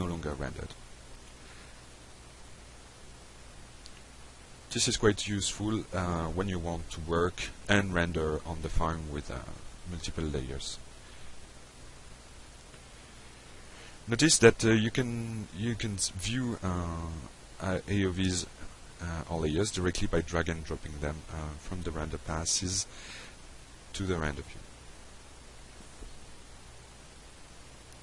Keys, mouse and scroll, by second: 2.6 click, 3.0 click, 3.5 click, 6.0 click, 13.8 click, 19.8 click, 21.6-22.3 drag, 23.3-23.6 drag, 24.9 click.